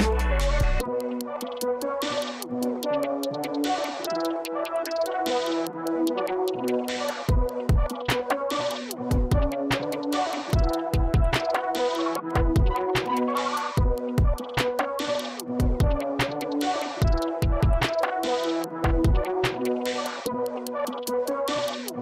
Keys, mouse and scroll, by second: 0.3 click, 1.7 click, 3.0 click, 5.0 click, 6.0 click, 13.6 click, 15.4 click, 16.1 KP_0, 16.4 KP_7, 16.6 Return, 17.4 click, 18.0 KP_0, 18.3 KP_3, 19.1 BackSpace, 19.7 KP_5, 19.9 Return.